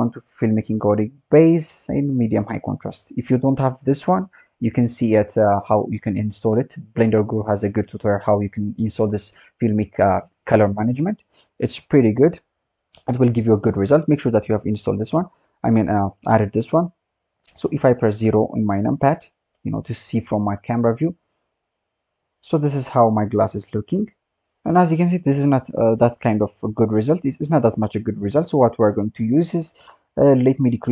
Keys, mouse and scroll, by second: 18.5 KP_0, 18.8 click, 21.5-21.9 scroll up 6, 22.3 scroll up 8, 27.6-28.8 drag, 28.8-30.5 scroll up 12, 30.5-30.9 drag.